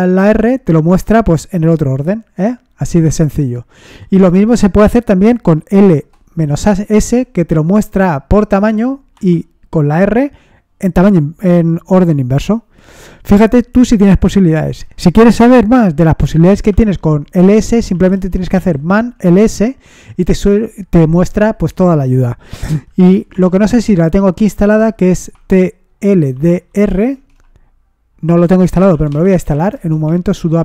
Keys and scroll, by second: 0.1 Return, 3.7 Up, 4.2 BackSpace, 5.7 s, 6.9 Return, 8.6 Up, 9.1 r, 9.9 Return, 16.7-19.0 typing, 19.1 Return, 22.8 typing, 25.6-27.1 typing, 28.5-30.6 typing.